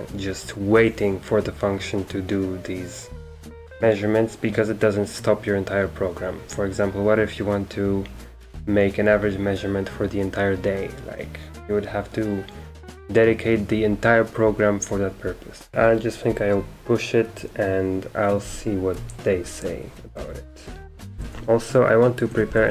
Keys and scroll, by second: 18.9 Escape, 19.4 Escape, 20.2 ctrl+c, 20.8-22.7 typing.